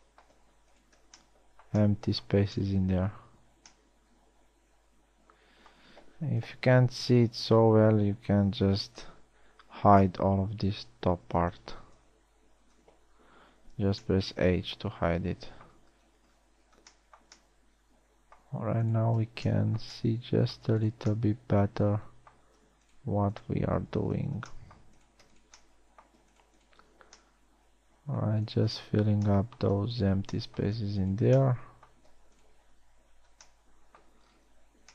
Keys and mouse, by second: 4.0 z, 7.0 KP_1, 8.4 a, 9.0 z, 9.5 b, 11.5 h, 12.6 KP_1, 13.3 KP_1, 14.2 z, 24.8 f, 27.5 f, 33.4 f.